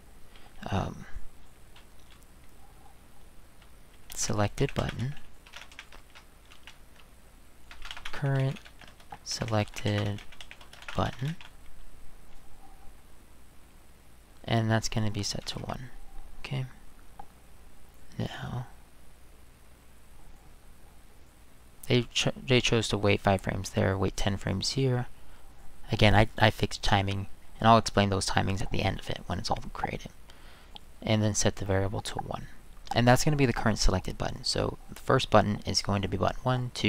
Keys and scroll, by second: 3.9-11.7 typing, 15.2-15.9 typing.